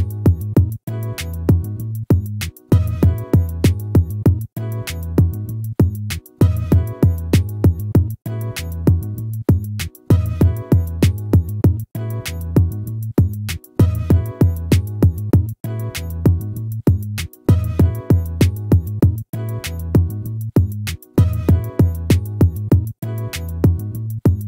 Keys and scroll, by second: 1.8 ctrl+-.